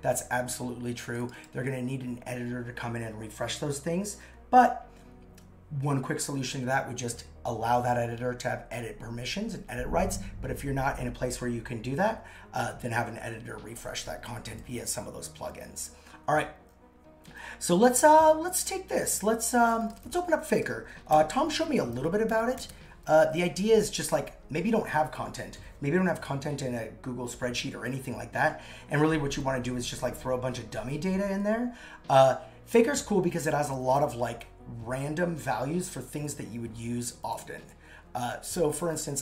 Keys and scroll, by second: 1.6 super+x, 21.1 super+/.